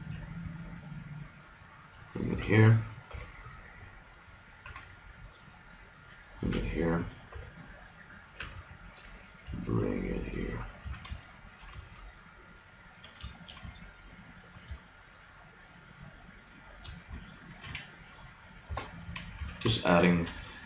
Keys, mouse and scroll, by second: 0.1 g, 2.4 a, 3.2 b, 4.6 g, 6.4 a, 7.4 b, 8.4 g, 10.8 a, 11.2 middle click, 14.5-16.8 middle drag, 17.6 ctrl+r, 19.4 a, 19.8-20.6 middle drag.